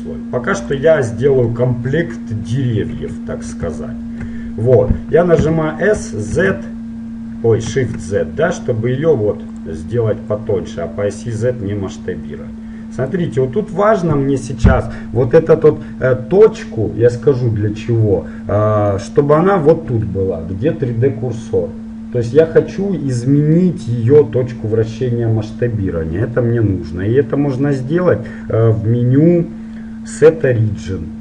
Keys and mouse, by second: 0.8 click, 1.6-2.7 middle drag, 3.1 KP_1, 5.6 s, 10.5-12.2 drag, 13.7-18.3 middle drag, 27.4-30.4 middle drag.